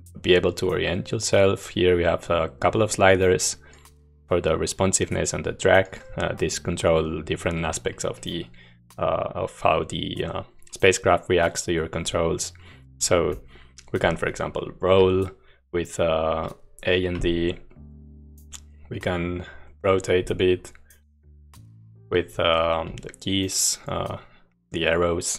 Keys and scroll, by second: 12.3-14.9 typing, 17.2-22.6 Left, 22.8-25.3 Left.